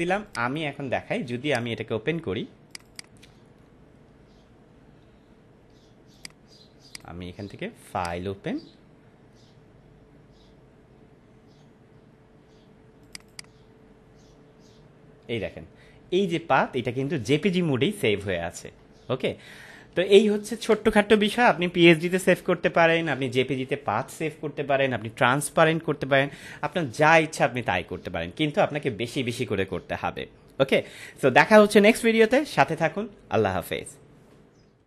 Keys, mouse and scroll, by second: 6.1 click, 13.0 click.